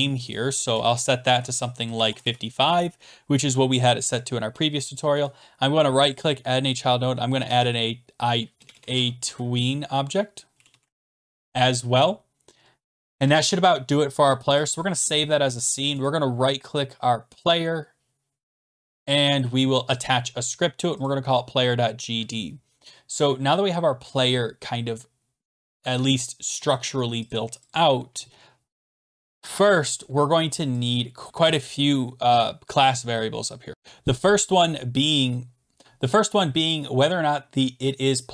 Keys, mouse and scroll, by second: 0.3 click, 0.8 5, 1.5 ctrl+5, 1.8 ctrl+a, 2.1 5, 2.2 Return, 5.2 Return, 5.3 right click, 6.1 click, 7.1-11.3 typing, 13.2 ctrl+s, 14.6 click, 16.0 right click, 18.9 middle click, 20.4 click, 21.1 click, 27.3 click, 27.7 click, 28.8 click, 30.8 click, 31.4 Return, 33.7 Right, 33.7 Left, 33.7 Return, 33.7-34.6 typing.